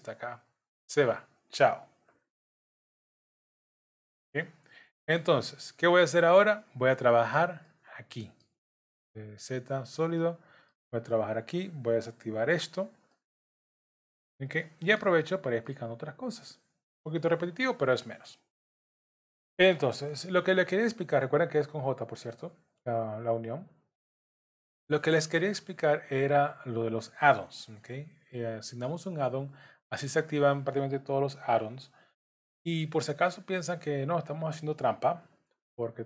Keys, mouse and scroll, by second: 4.3-4.8 scroll up 1, 7.6 middle click, 9.3 z, 10.2 middle click, 12.5 click, 13.1 shift+middle click, 13.6-14.0 scroll up 2, 14.0 middle click, 15.2 shift+middle click, 16.9 click, 18.9 shift+click, 20.1 j, 22.8 click, 23.6 shift+click, 24.7 j, 25.8 click, 26.7 click, 27.8 j, 28.3 middle click, 29.5 click, 30.2 shift+j, 30.3 shift+click, 32.0 j, 33.2 click, 34.0 shift+click, 35.2 j.